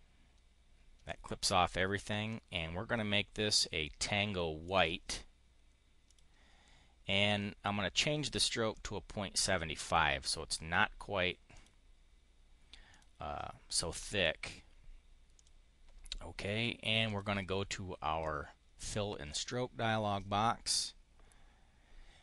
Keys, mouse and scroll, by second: 2.2-3.5 drag, 4.5 click, 6.0 click, 7.2 click, 8.6 click, 9.3 click, 11.5 click, 12.8 click, 15.2 click, 17.0 click, 18.1 click, 19.2 click.